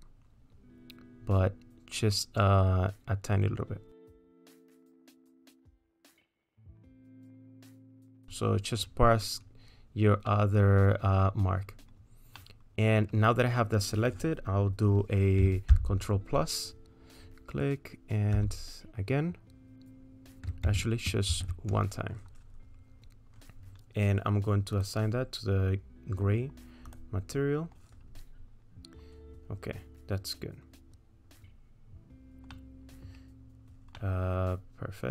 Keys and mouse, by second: 4.5-7.9 drag, 8.3 middle click, 10.3 middle click, 12.4 middle click, 15.7 ctrl+KP_Add, 18.4 ctrl+KP_Add, 21.3 ctrl+z, 24.8 click, 26.9-32.2 drag, 32.5 middle click, 34.0-35.0 middle drag.